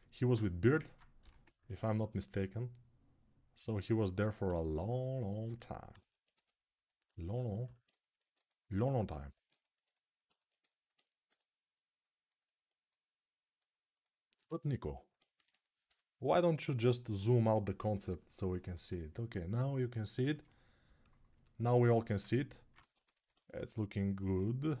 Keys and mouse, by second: 1.0 g, 3.3-5.7 alt+right drag, 6.1 2, 8.8-10.0 alt+right drag, 8.8 typing, 11.0 g, 16.6 right click, 17.0 right click, 17.2 right click, 17.4-20.9 right drag, 22.6 ctrl+z.